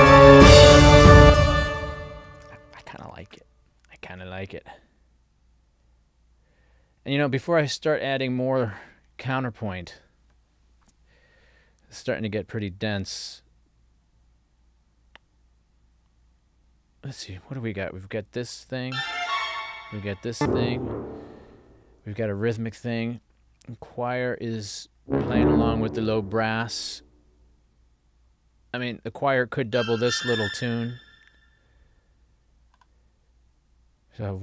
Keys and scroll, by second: 1.3 space, 2.4 super+s.